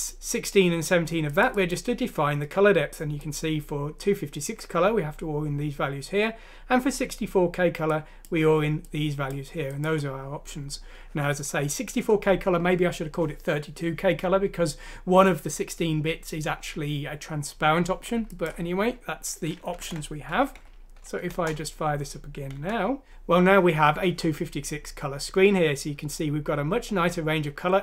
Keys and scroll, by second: 19.8 ctrl+Home, 20.7 ctrl+F6, 21.4 Return, 22.5 End.